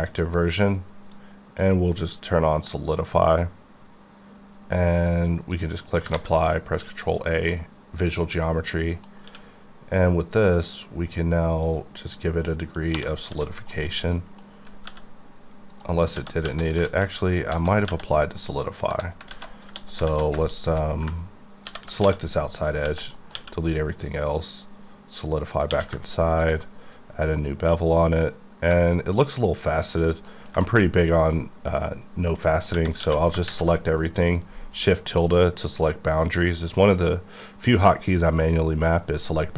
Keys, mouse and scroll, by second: 1.2 click, 4.4 click, 5.6 click, 6.2 ctrl+a, 6.9 click, 7.5 middle click, 9.3 q, 11.7 click, 12.9-13.3 typing, 13.7 right click, 14.1-14.9 scroll up 2, 14.2 middle click, 14.2 middle click, 14.9 g, 15.7 right click, 16.9 alt+z, 17.5 alt+z, 19.3 alt+z, 19.7 3, 20.1 alt+z, 20.6 alt+click, 21.7 ctrl+i, 22.1 x, 22.6 click, 23.2 middle click, 24.4 click, 25.5 click, 26.4 ctrl+click, 27.1-27.6 scroll down 1, 27.7 scroll down 2, 29.8 shift+click, 30.3 middle click, 30.9 scroll up 3, 32.5 middle click, 33.0 a, 33.5 shift+`, 35.7 click.